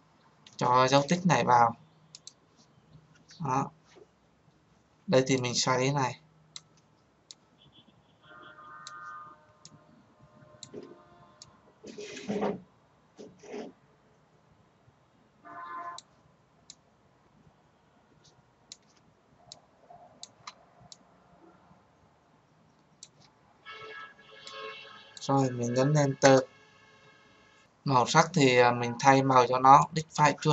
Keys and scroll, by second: 26.0 Return.